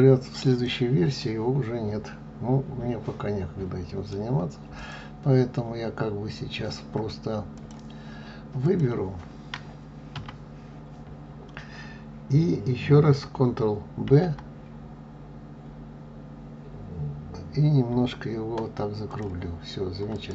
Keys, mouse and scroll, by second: 1.1-4.1 middle drag, 4.7 click, 7.5 click, 8.5 click, 10.1 a, 14.0 ctrl+b, 20.0 click.